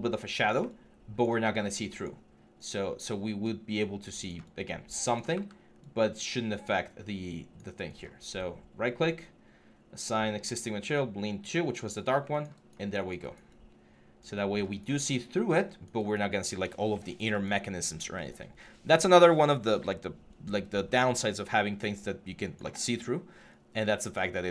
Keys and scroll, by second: 5.1 w.